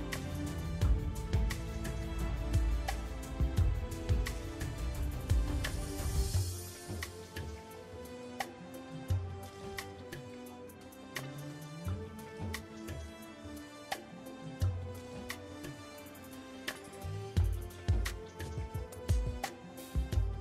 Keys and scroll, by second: 3.7 KP_1.